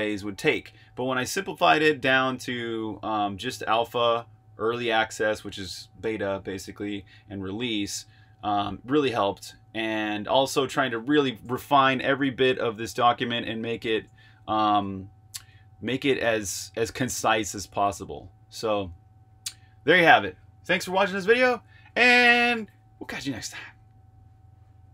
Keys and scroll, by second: 11.4 BackSpace, 14.4 super+z.